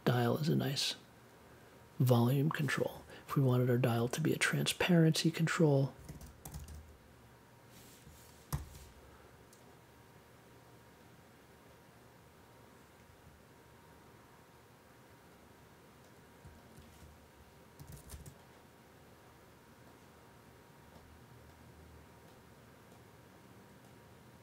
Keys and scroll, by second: 5.7-7.1 typing, 8.5 super+j, 13.0 a, 17.5-18.7 typing.